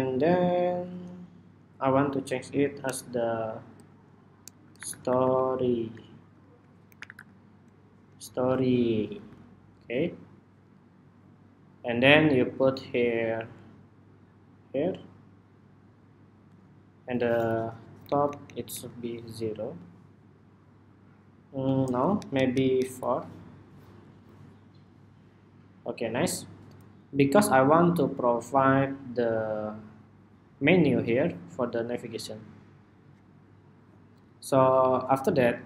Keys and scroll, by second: 7.8 Escape, 8.7 Escape, 17.8 alt+Up, 18.0 alt+Up, 18.2 alt+Up, 18.5 alt+Up, 19.8 alt+Up, 22.1 alt+Down, 22.3 alt+Down, 22.5 alt+Down, 23.8 alt+Down.